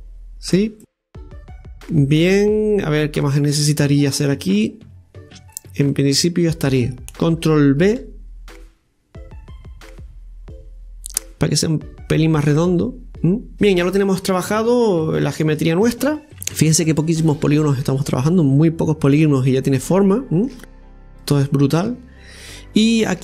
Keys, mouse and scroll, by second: 0.8-7.0 middle drag, 7.0 alt+shift+right click, 7.9 ctrl+b, 13.5 scroll up 5, 13.7 middle click, 14.4-15.0 scroll down 6, 15.1-16.3 middle drag, 16.3 scroll up 2, 16.5 right click, 16.7 Tab, 17.3 middle click, 18.5-21.1 middle drag, 21.1 Tab, 21.5-23.2 middle drag.